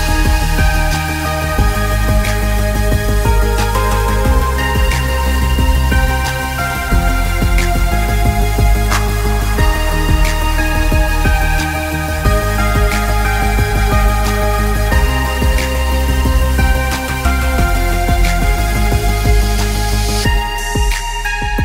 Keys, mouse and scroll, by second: 0.4 click, 0.8 scroll down 1, 1.0 space, 1.1 scroll up 1, 1.4 click, 4.2 click, 4.8 scroll down 1, 5.1 click, 7.1-7.6 scroll down 2, 7.3 click, 7.7 click, 9.0 click, 9.8 scroll up 1, 9.9 scroll down 1, 10.1 click, 13.3 alt+scroll down 1, 13.6 scroll up 1, 13.7 click, 14.4 click, 15.6 alt+scroll, 15.7 alt+scroll up 1, 15.8 space, 16.0 click, 18.8 alt+scroll down 1, 19.3 alt+scroll up 1, 19.4 space, 19.7 click, 20.1 s, 20.8 click, 20.9-21.4 alt+scroll up 3, 21.0 space.